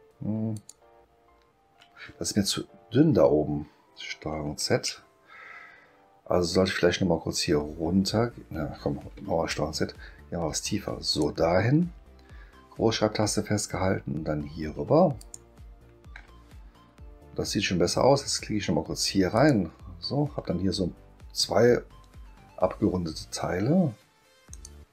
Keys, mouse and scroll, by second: 0.5 shift+click, 9.2 ctrl+z, 11.1 click, 15.2 shift+click, 19.3 click, 24.5 click.